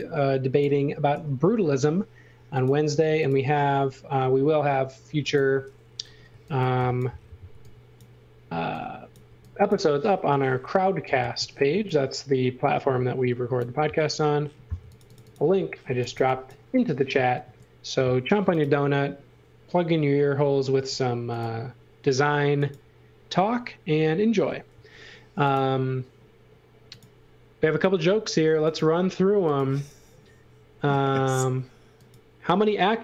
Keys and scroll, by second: 0.0-1.1 typing, 6.3-9.2 typing, 11.7 x, 14.7-17.4 typing, 20.7 space, 24.7 l, 31.4 space.